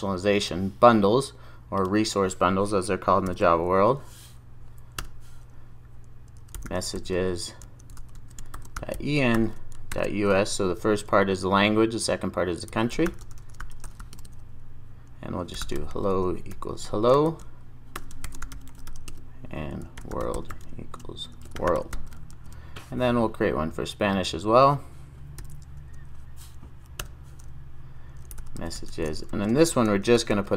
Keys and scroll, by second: 22.4 super+s, 25.4 super+s, 25.5 super+n.